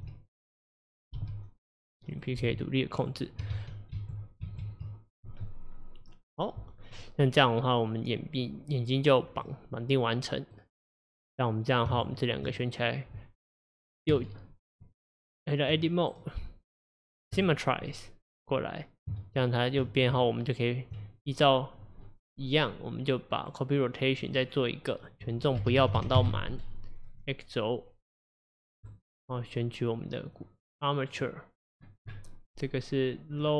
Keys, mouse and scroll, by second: 1.3 g, 2.3 click, 2.5 g, 3.6 ctrl+z, 4.0 ctrl+z, 4.5 ctrl+z, 9.5-12.0 middle drag, 12.0 shift+click, 14.9 Tab, 16.1-17.9 right drag, 17.9-20.2 middle drag, 21.0 Tab, 21.2 click, 23.4-27.2 drag, 28.9 click, 31.2-33.5 drag.